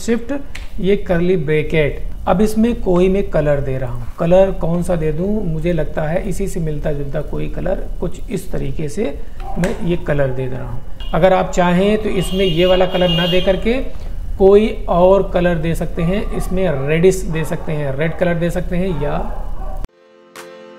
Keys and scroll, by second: 9.6 alt+Delete.